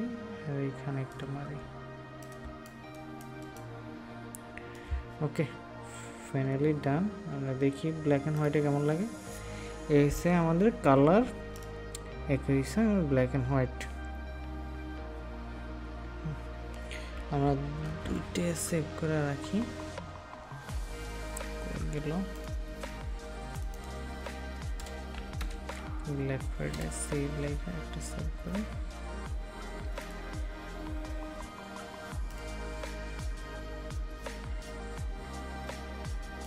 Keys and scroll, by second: 2.4 ctrl+space, 18.0 ctrl+alt+s.